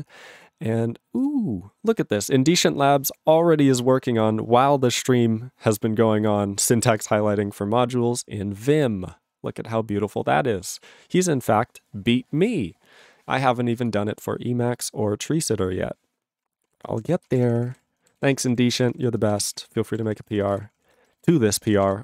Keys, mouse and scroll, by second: 15.6 ctrl+s, 16.1 click, 16.7 ctrl+e, 17.1 ctrl+s, 17.3 ctrl+space, 17.3 ctrl+a, 17.3 ctrl+p, 17.5 ctrl+p, 17.7 ctrl+g, 17.7 ctrl+e, 18.2 ctrl+s, 18.4 ctrl+n, 18.5 ctrl+n, 18.7 ctrl+space, 18.7 ctrl+e, 18.8 ctrl+n, 18.9 ctrl+e, 19.0 ctrl+g, 19.2 ctrl+space, 19.3 ctrl+a, 19.4 ctrl+p, 19.6 ctrl+p, 19.7 ctrl+e, 19.9 ctrl+a, 20.1 ctrl+g, 20.2 ctrl+space, 20.3 ctrl+n, 20.4 ctrl+n, 20.5 ctrl+g, 20.6 ctrl+e, 20.7 ctrl+p, 20.8 ctrl+p, 20.8 ctrl+a, 21.0 ctrl+space, 21.1 ctrl+n, 21.2 ctrl+n, 21.2 ctrl+g, 21.3 ctrl+e, 21.7 ctrl+p.